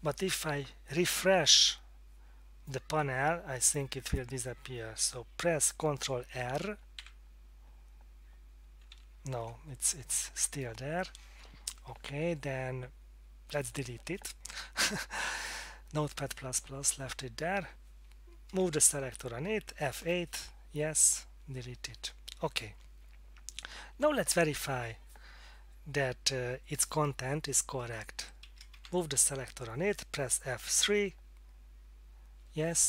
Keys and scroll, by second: 7.0 ctrl+r, 8.9 ctrl+r, 10.2 Down, 10.3 Down, 10.5 Down, 18.8 Down, 20.0 F8, 21.1 Return, 28.7 Down, 30.9 F3.